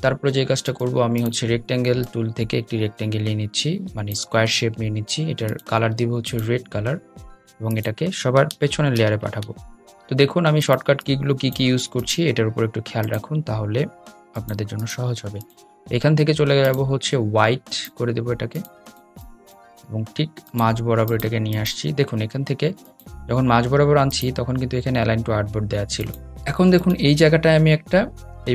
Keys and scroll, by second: 8.0 super+{, 9.3 super+{.